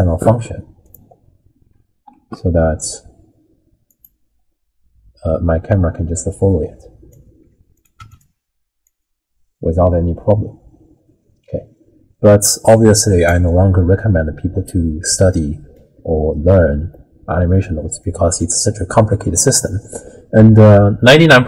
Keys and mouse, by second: 2.1 alt+g, 3.9 click, 5.8-7.2 drag, 7.9 click, 8.8-13.3 drag, 15.3 middle click, 18.1 middle click.